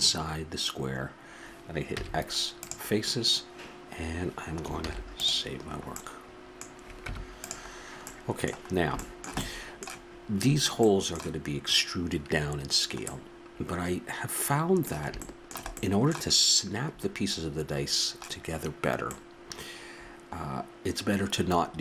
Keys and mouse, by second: 1.9 x, 4.8 ctrl+s, 7.0 Tab, 19.2-19.5 middle drag.